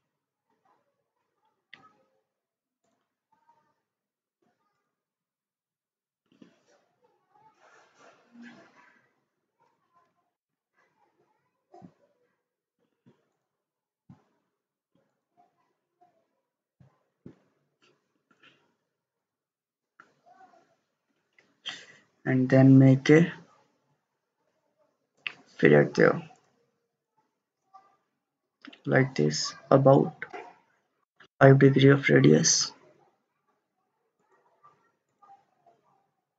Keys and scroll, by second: 10.4 ctrl+z, 31.1 typing, 31.3 Return.